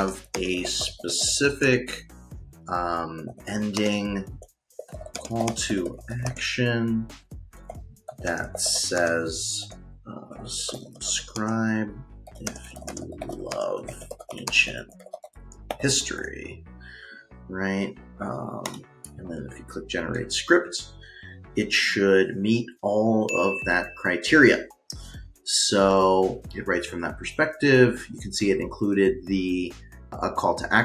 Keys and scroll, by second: 0.0-1.5 typing, 2.7-19.1 typing.